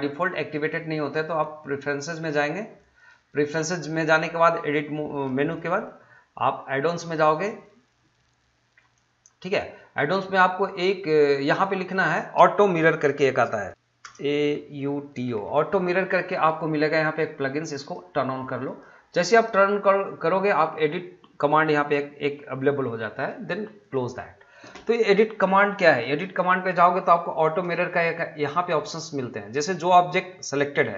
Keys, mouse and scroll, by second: 2.8-6.9 drag, 11.5 click, 14.8-15.3 typing, 17.8 click, 23.8 click, 29.7 middle click.